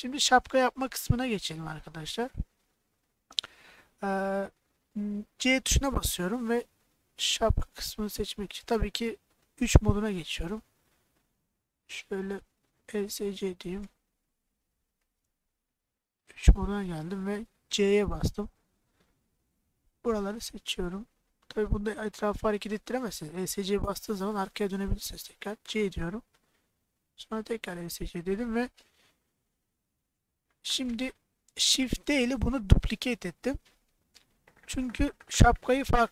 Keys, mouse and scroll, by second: 0.0 middle click, 0.7 middle click, 1.3 shift+middle click, 3.1 middle click, 5.3 shift+middle click, 6.1 c, 10.2 3, 10.7 click, 11.6 click, 11.8 right click, 12.5 middle click, 12.9 Tab, 13.4 middle click, 13.9 Tab, 15.0 Escape, 15.3 click, 16.3 3, 17.8 c, 20.0 middle click, 21.0 click, 23.4 Escape, 23.7-24.7 middle drag, 25.4 c, 27.4 Escape, 27.9-29.0 middle drag, 30.0 middle click, 32.2 shift+d.